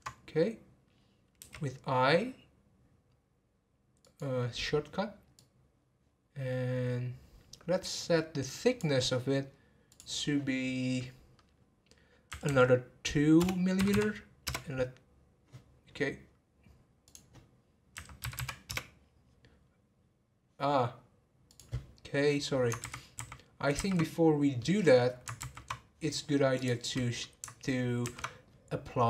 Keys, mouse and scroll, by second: 9.9-12.4 drag, 12.4 2, 17.0-18.3 drag, 18.3 m, 22.8 ctrl+z, 23.1 ctrl+z, 24.2-24.6 scroll down 2, 24.6 middle click, 25.4 ctrl+z, 26.5 click.